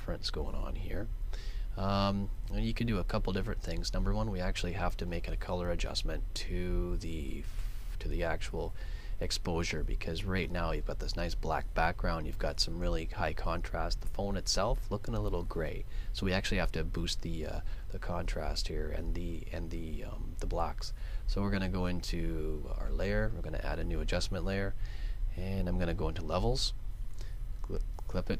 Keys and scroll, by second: 5.1 super+Tab.